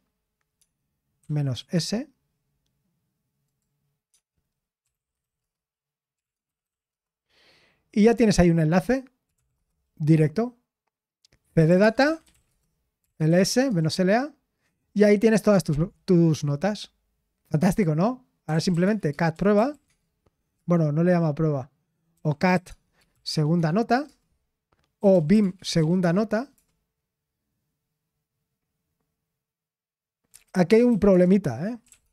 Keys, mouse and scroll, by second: 0.6-1.7 typing, 4.1-7.2 typing, 9.0-9.8 typing, 11.3-14.0 typing, 19.3-20.5 typing, 21.9-26.5 typing, 31.6-32.1 typing.